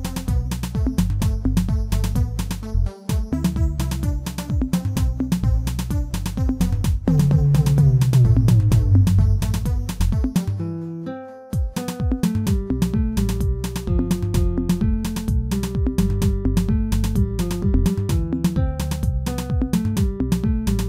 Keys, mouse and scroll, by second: 0.2 middle click, 0.7 Tab, 3.0 g, 4.4 middle click, 5.1 scroll up 1, 6.2 3, 6.7 alt+click, 7.3 scroll up 1, 7.6-10.8 shift+middle drag, 10.8 2, 11.5 alt+click, 12.9 g, 14.5 alt+click, 15.4 alt+click, 15.9 x, 17.4 3, 17.8 alt+click, 18.6 shift+middle click, 19.0-20.7 scroll up 1, 20.7 i.